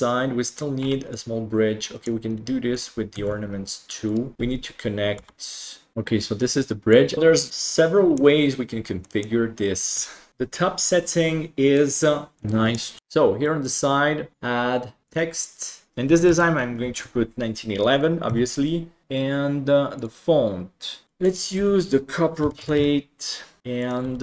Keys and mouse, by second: 1.1-2.0 middle drag, 3.1 Tab, 5.1 g, 6.9 click, 7.1-8.2 middle drag, 9.1 middle click, 10.3-12.3 middle drag, 12.4 middle click, 13.6 click, 14.3 click, 15.9-17.0 typing, 19.9 click, 23.6 s, 24.0 g.